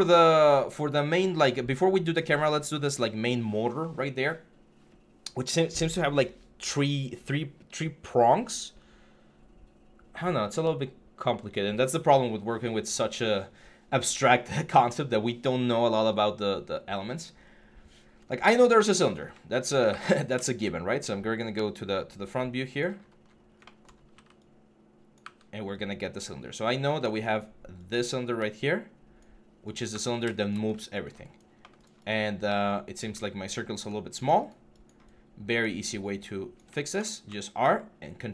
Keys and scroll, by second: 19.7 w, 29.7 w, 32.2 1, 32.5 4.